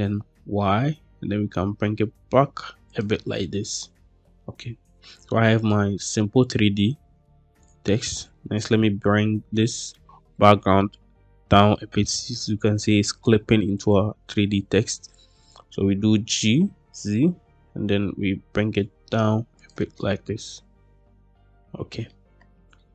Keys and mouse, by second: 0.2 y, 2.8 click, 3.2-4.2 middle drag, 4.9-5.6 middle drag, 7.5 click, 8.2 middle drag, 10.2-11.8 middle drag, 14.2-15.5 middle drag, 16.0 g, 16.7 z, 19.5 click, 19.8-22.0 middle drag, 22.7-22.9 shift+middle drag.